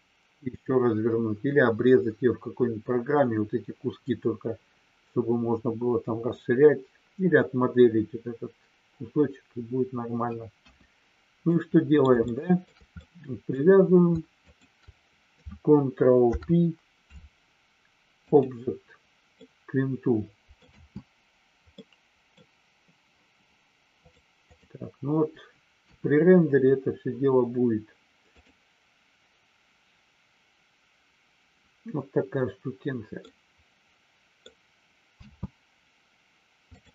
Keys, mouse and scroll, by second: 10.6 KP_1, 11.5 middle click, 12.3 shift+scroll up 1, 12.4 shift+middle click, 12.9 scroll up 1, 13.1 middle click, 14.4 shift+click, 19.4-20.5 middle drag, 20.6 space, 21.6 middle click, 23.9 click, 24.5 click, 25.7 KP_1, 28.3 click, 33.3-34.5 middle drag, 35.1 space, 36.7 click.